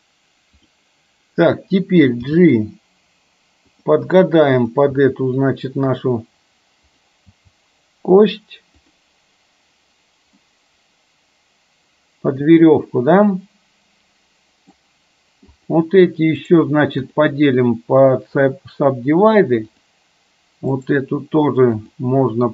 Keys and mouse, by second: 2.3 g, 4.7 click, 5.0 g, 7.3 g, 10.4-14.9 middle drag, 15.7 click, 19.8 click, 20.9-22.0 right drag.